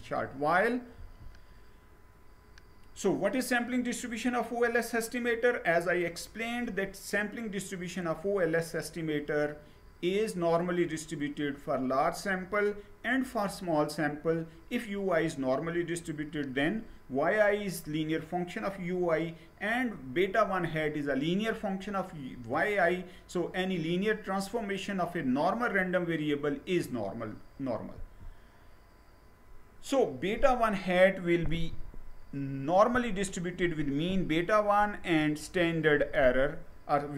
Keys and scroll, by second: 0.7 Down, 27.6 Down.